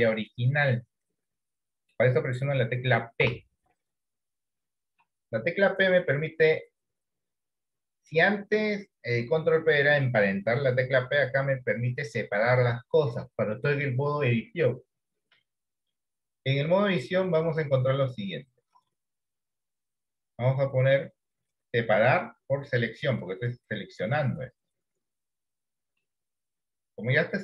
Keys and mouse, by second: 3.3 p, 26.1-27.4 middle drag.